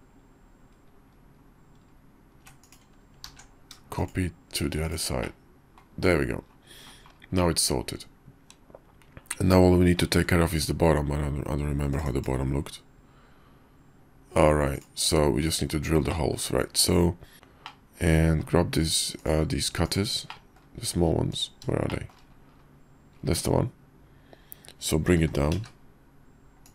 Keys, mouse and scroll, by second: 3.2 alt+x, 5.2-5.8 drag, 6.1 KP_5, 7.3-9.3 drag, 9.3-9.9 middle drag, 10.1 `, 16.1 drag, 17.3 alt+h, 17.6-18.4 drag, 20.3 drag, 21.8-22.1 shift+middle drag, 23.4 `, 25.1 g.